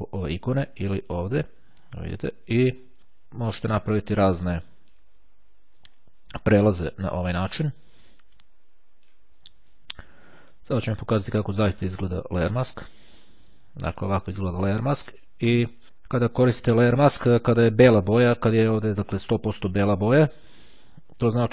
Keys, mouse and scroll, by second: 0.6 click, 3.0 click, 4.6 click, 7.7-9.7 drag, 10.5 right click, 11.8-13.2 drag.